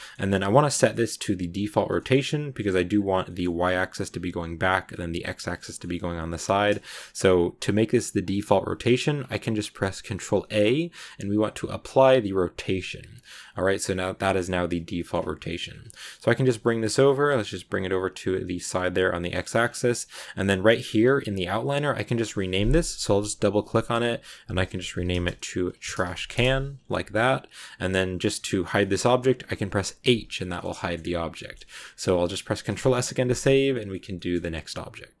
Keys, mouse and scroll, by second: 2.8-3.1 scroll down 1, 3.1-5.7 middle drag, 5.7-6.7 scroll up 2, 6.7-10.1 shift+middle drag, 10.1 ctrl+a, 13.1 scroll down 1, 13.1 scroll up 1, 13.2-14.8 middle drag, 14.8 scroll down 1, 14.8 middle click, 15.5 scroll down 1, 15.5 scroll up 1, 15.5-15.9 scroll down 1, 15.9 middle click, 16.3 g, 18.7-19.4 scroll down 2, 19.4-21.6 scroll up 2, 21.6 click, 21.7-24.9 drag, 27.1-28.5 scroll down 2, 28.5 middle click, 28.7-29.3 scroll up 1, 29.3-29.9 scroll up 1, 29.9 h, 30.6 shift+middle click, 30.9-31.3 scroll up 2, 31.3 shift+middle click, 31.6 z, 32.6 ctrl+s, 33.6-35.2 shift+middle drag.